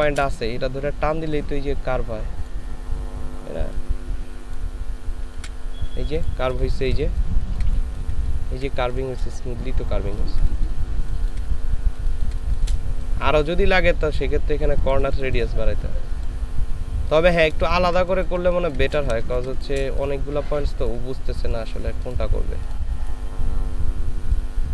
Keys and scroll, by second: 5.4 ctrl+z, 6.6 ctrl+space, 10.1 ctrl+space, 11.0 ctrl+space, 12.0 ctrl+space, 17.6 ctrl+space, 19.2 ctrl+space.